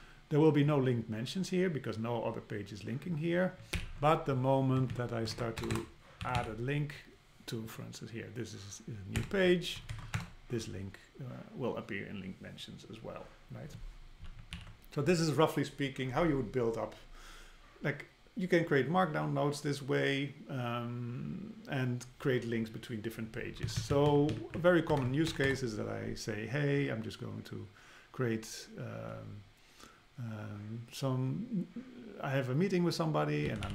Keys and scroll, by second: 3.7 alt+h, 4.8 Down, 5.3 super+Right, 5.6 Return, 9.2 Return, 9.8 Left, 10.1 super+Return, 14.5 alt+h, 23.6 Down, 24.4 Down, 24.6 Up, 25.0 super+Right, 25.3 Return.